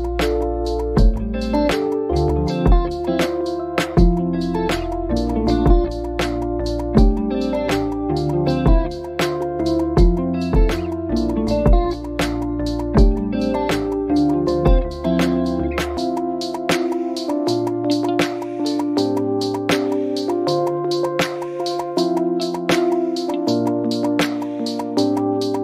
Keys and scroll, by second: 10.0 ctrl+i.